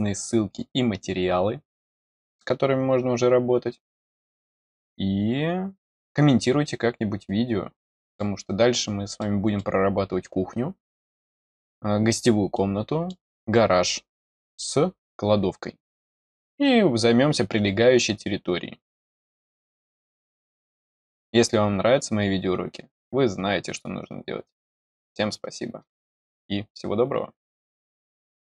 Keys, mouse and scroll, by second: 7.7 middle click, 9.1 middle click, 10.8 middle click, 12.5 middle click, 14.1 middle click, 16.5 scroll down 1.